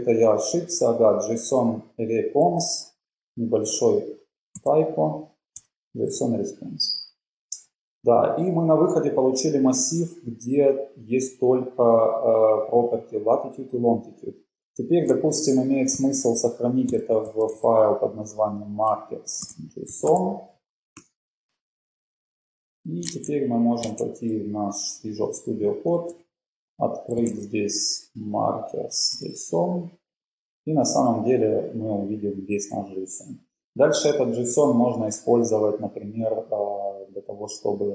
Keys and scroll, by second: 7.4 Return, 15.9-21.7 typing, 23.2 super+Tab, 26.4 super+p, 26.9-27.9 typing, 29.4 Return, 32.9 Page_Down, 33.7 Page_Up, 34.4 Page_Down, 34.8 Page_Up, 37.6 shift+super+Down.